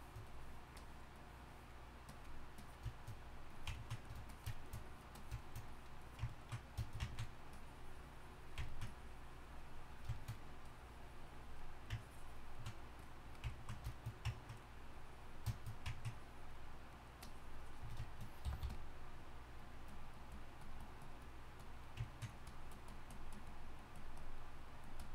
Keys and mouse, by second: 18.4 g, 18.6 f.